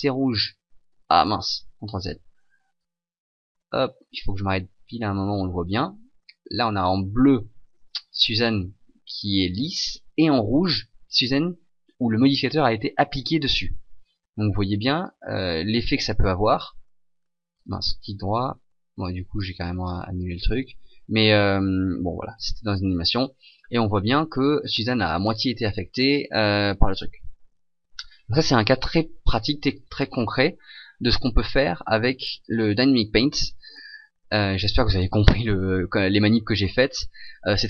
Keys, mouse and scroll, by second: 1.7 ctrl+z, 3.0 click, 8.1 middle click, 8.9 middle click, 15.0 click, 19.4 right click, 20.2 click, 22.3 alt+a, 28.8 Escape, 29.8 right click, 32.4 click.